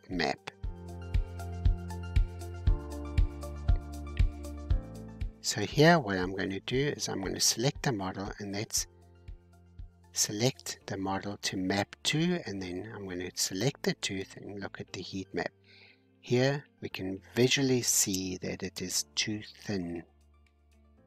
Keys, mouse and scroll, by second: 1.1-1.5 scroll down 2, 3.4-4.1 scroll down 5, 6.9-14.3 drag, 14.3-16.5 scroll up 3, 16.5-16.9 scroll up 1, 18.4-19.8 scroll down 2.